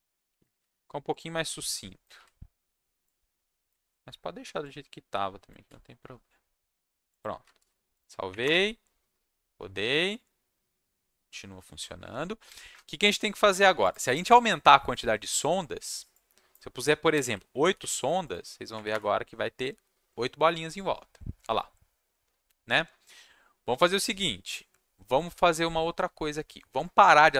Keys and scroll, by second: 0.5 ctrl+v, 2.1 ctrl+v, 3.8 ctrl+v, 5.6 ctrl+v, 7.5 ctrl+shift+s, 8.3 Up, 8.4 Return, 17.6 ctrl+s, 18.7 Up, 18.9 Return.